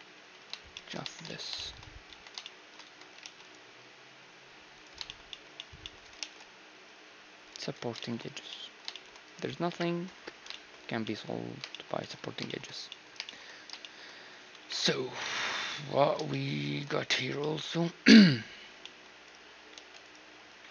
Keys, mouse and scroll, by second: 0.6 Tab, 1.8 Tab, 2.5 Tab, 2.8 ctrl+r, 5.5-7.3 middle drag, 5.9 ctrl+r, 7.3 Tab, 7.3-14.9 middle drag, 9.3 KP_1, 14.2 KP_1, 15.3 a, 18.9-20.7 right drag, 19.3 g, 20.0 1.